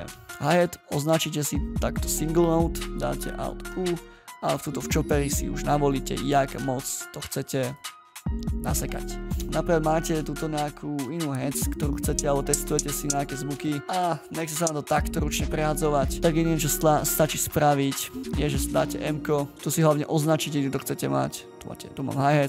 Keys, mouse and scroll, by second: 3.3 alt+u, 9.3 space.